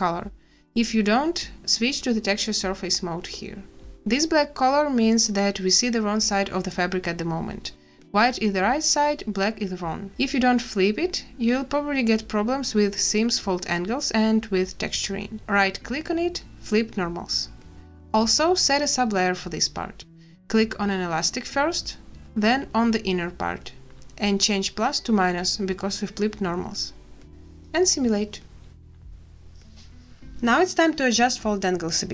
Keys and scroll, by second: 26.8 a, 27.3 space.